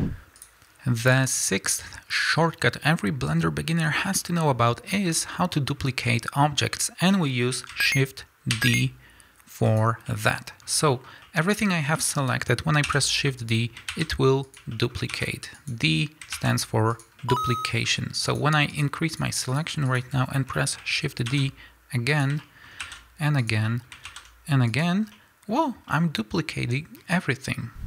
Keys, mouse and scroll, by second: 0.3 click, 2.1-9.8 middle drag, 8.5 shift+d, 9.8 shift+click, 10.1-13.5 shift+middle drag, 12.9 shift+d, 13.5 click, 13.9 shift+d, 14.5 click, 14.7-15.7 shift+middle drag, 15.1 shift+d, 15.7 click, 16.4 shift+d, 17.0 click, 17.2-18.3 middle drag, 18.3 shift+drag, 18.7 shift+drag, 19.1 shift+click, 19.5 shift+drag, 19.9 shift+click, 20.3 scroll down 1, 20.5-22.2 middle drag, 21.3 shift+d, 22.2 click, 22.4-23.5 shift+middle drag, 22.8 shift+d, 23.5 click, 23.7-24.8 middle drag, 24.1 shift+d, 24.8 click, 25.0 scroll down 2, 25.1-27.8 middle drag, 25.6-25.9 scroll up 2.